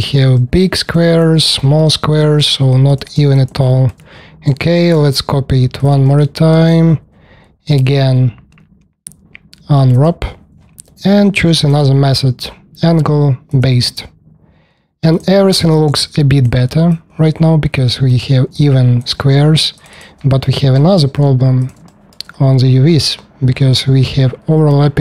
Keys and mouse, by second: 2.1 alt+click, 3.3 alt+middle click, 4.5 shift+d, 6.0 alt+click, 15.1 middle click, 15.6-17.0 alt+drag, 17.1 alt+click, 19.7 click, 21.0 w, 22.1 click, 22.5 click, 22.8-25.0 drag.